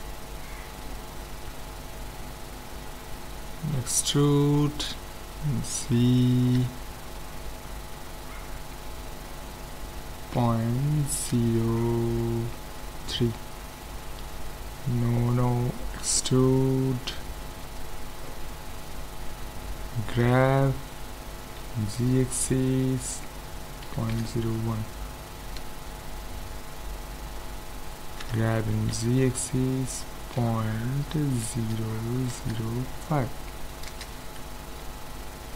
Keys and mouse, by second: 1.0-2.1 middle drag, 4.0 e, 16.0 e, 20.1 g, 28.2 g, 35.1-35.5 middle drag.